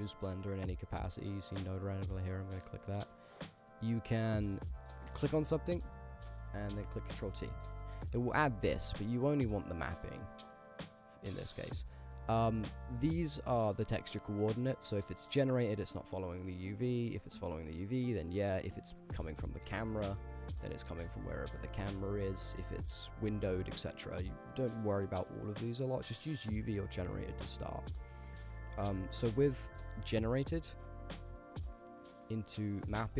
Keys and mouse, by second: 1.9 click, 3.4 click, 4.2 middle click, 5.2 click, 7.1 ctrl+t, 8.1 click, 9.1 x, 9.6-10.4 drag, 10.7 click, 11.8 shift+middle drag, 12.5 middle click, 13.0-14.4 drag, 14.9-15.6 drag, 16.8 ctrl+z, 17.1 click, 17.2-18.1 drag, 18.4 ctrl+z, 18.7-19.3 drag, 20.2 KP_0, 21.0 shift+`, 21.9 Escape, 22.9-23.6 drag, 24.8 ctrl+z, 25.8-26.4 drag, 28.0 shift+click, 28.1 middle click, 28.5 middle click, 29.2 click, 29.9 click, 30.1-30.7 drag, 31.0 click, 32.2 middle click.